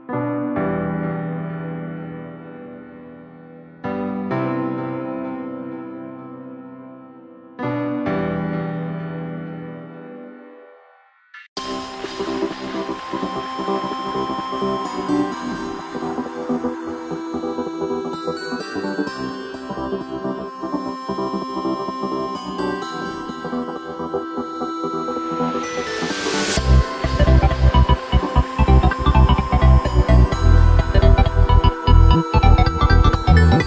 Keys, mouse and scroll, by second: 0.4 scroll up 1, 0.8 middle click, 1.7 KP_1, 2.1-2.5 scroll up 1, 2.5 shift+middle click, 3.3 3, 3.9 click, 5.1-6.6 middle drag, 6.6 i, 7.9 s, 10.5 Tab, 10.8 s, 12.3 Tab, 12.6-13.8 middle drag, 13.8 e, 18.3 Tab, 18.7 middle click, 19.2-19.7 scroll down 1, 19.7-20.7 middle drag, 20.7 g, 24.6-25.0 scroll down 2, 25.0 right click, 25.3 scroll down 1, 26.4 scroll down 1, 26.6-27.3 middle drag, 27.3 scroll up 2, 27.6 right click, 28.3 s, 30.6 g, 32.2-33.1 middle drag, 33.1 scroll up 1, 33.2 scroll down 1, 33.3-33.6 scroll up 2.